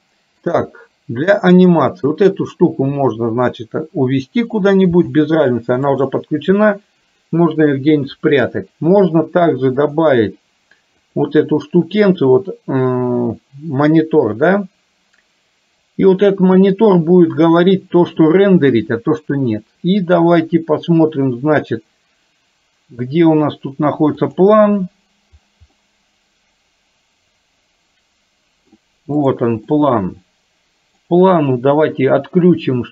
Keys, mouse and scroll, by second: 2.1 click, 5.3 g, 10.0-14.9 drag, 24.2 click, 25.8-28.9 middle drag, 29.3 click, 29.9-31.2 middle drag.